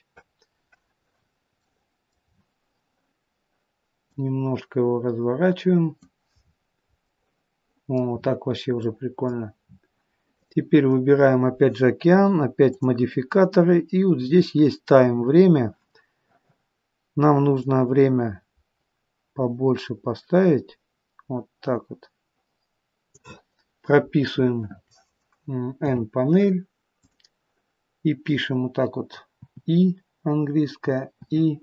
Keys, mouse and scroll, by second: 1.1-1.7 scroll down 3, 1.5 middle click, 2.2 scroll down 2, 4.0 click, 6.3 scroll up 6, 6.9 middle click, 8.1 scroll up 1, 8.7 middle click, 9.9 scroll down 5, 10.2 click, 12.7 click, 17.5 click, 25.7 n, 26.8 click, 29.6 i, 31.3 i.